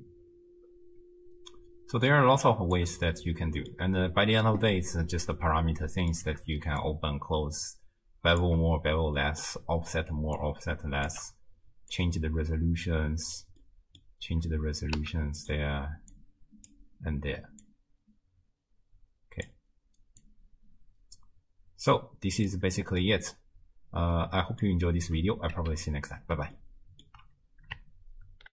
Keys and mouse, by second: 3.1 middle click, 5.4-6.2 middle drag, 6.8-8.4 shift+drag, 9.2 middle click, 10.4 shift+click, 11.9-13.4 drag, 13.6 middle click, 15.0 z, 16.1 click, 17.6-19.5 drag, 20.2-21.9 drag, 22.5 middle click, 24.3 click, 25.5 z, 26.6 ctrl+click, 26.6 ctrl+right click.